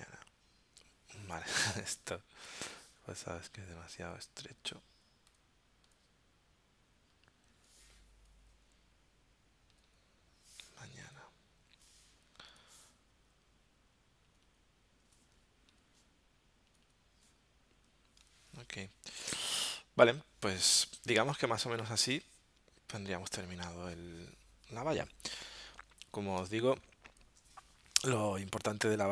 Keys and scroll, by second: 0.0-0.4 typing, 11.1 a, 21.1 space, 26.4 space.